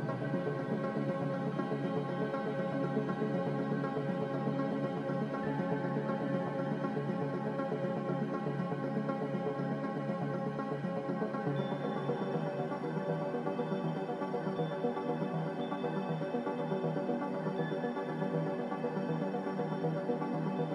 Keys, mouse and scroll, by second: 11.6 b, 14.1 m.